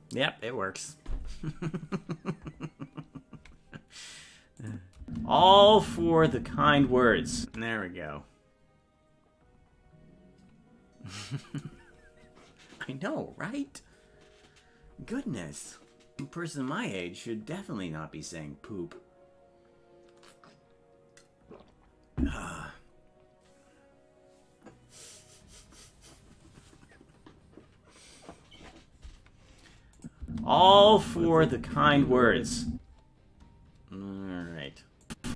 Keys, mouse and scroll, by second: 4.6 click, 5.0 space, 30.0 click, 30.2 space, 35.1 click.